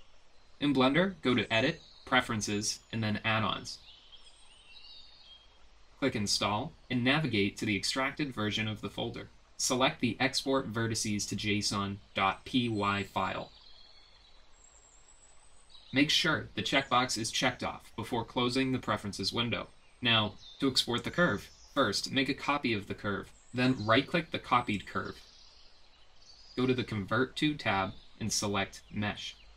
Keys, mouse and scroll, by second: 1.8-3.1 drag, 21.8 click, 22.4 ctrl+c, 23.0 ctrl+v, 24.3 click, 24.8 click, 26.6 click, 28.9-29.5 drag.